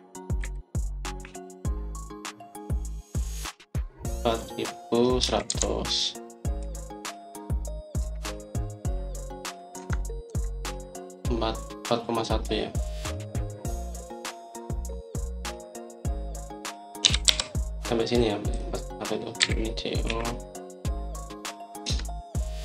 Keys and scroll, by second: 0.4 Escape, 1.3-2.1 typing, 5.8-7.7 typing, 9.0 Return, 10.6 Escape, 11.2 Escape, 17.7-18.6 typing, 20.3-21.4 typing.